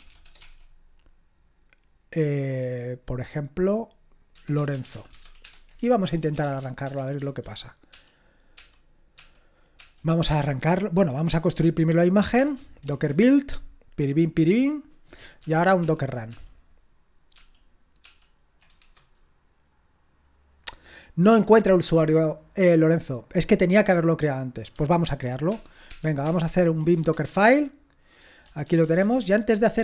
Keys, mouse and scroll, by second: 0.0-0.6 typing, 4.1-8.4 typing, 12.4 ctrl+p, 15.4 ctrl+p, 15.8 ctrl+p, 16.3 ctrl+p, 17.3 ctrl+p, 18.8 Return, 25.5 ctrl+p, 25.9 ctrl+p, 26.3 ctrl+p, 26.9 Return, 28.2-29.0 typing.